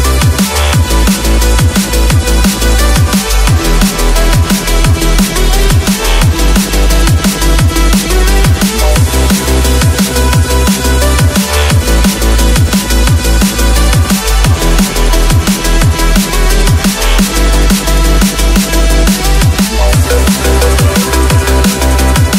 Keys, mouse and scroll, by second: 0.0-2.4 typing, 17.7 shift+click, 17.9-18.2 shift+scroll down 1, 18.3 shift+click, 18.5 right click, 19.5 scroll up 1, 19.8 ctrl+z, 20.0 ctrl+z, 21.2 shift+click, 21.6-22.0 shift+scroll down 1.